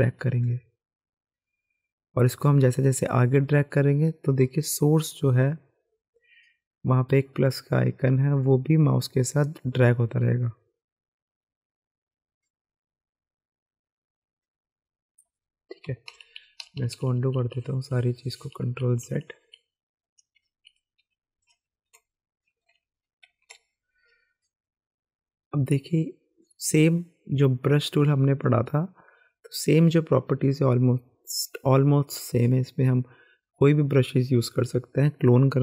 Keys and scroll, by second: 16.1 ctrl+z, 16.6 ctrl+z, 16.8 ctrl+z, 16.9 ctrl+z, 17.1 ctrl+z, 17.2 ctrl+z, 17.4 ctrl+z, 17.6 ctrl+z, 17.7 ctrl+z, 18.7-19.0 typing, 20.3 ctrl+shift+z, 20.5 ctrl+shift+z, 21.9 ctrl+s, 22.7 Escape, 22.9-23.4 typing.